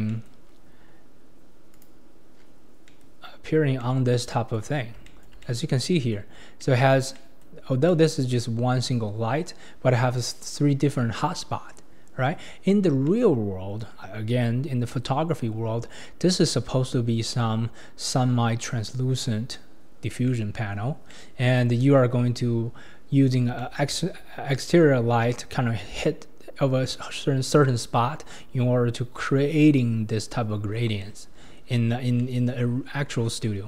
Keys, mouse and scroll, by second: 0.1-0.5 middle drag, 0.5-0.9 scroll down 7, 1.9 Left, 2.3-2.9 scroll down 3, 2.9 middle click, 3.0-3.8 scroll down 9, 3.8-4.8 middle drag, 4.8 scroll down 3, 5.1-6.3 shift+middle drag, 6.3 scroll up 4, 6.5-7.2 scroll down 1, 7.2-7.7 middle drag, 7.7 scroll up 3, 7.9-9.4 middle drag, 9.4-11.3 scroll down 2, 12.7-13.1 scroll down 1, 13.1 middle click, 13.5-15.1 scroll up 1, 15.1-17.2 middle drag, 20.3 middle click, 21.1 middle click, 23.3-23.6 scroll down 3, 23.6-33.6 shift+middle drag.